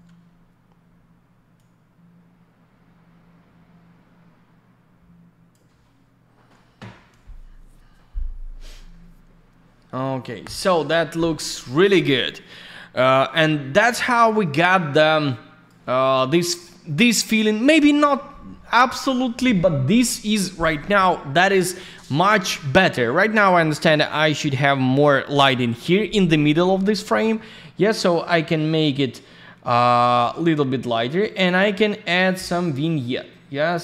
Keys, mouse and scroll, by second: 1.5 click, 13.1 click, 27.2 click, 32.2 click.